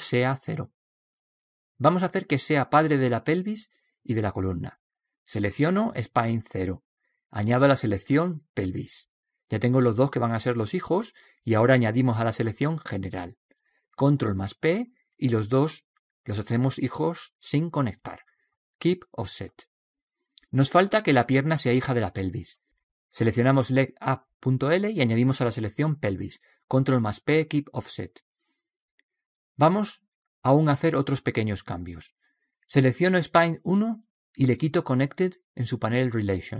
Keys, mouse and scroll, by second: 6.5 right click, 9.0 right click, 13.0 right click, 14.5 ctrl+p, 14.9 right click, 23.5-26.9 right drag, 28.0 right click, 29.0 ctrl+p, 34.7 right click.